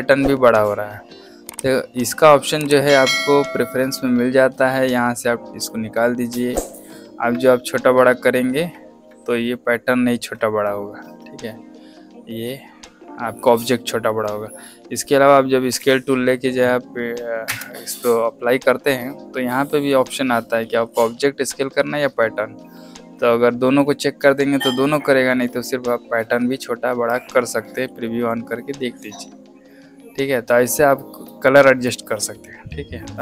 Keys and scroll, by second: 15.7 s, 17.4 KP_Enter.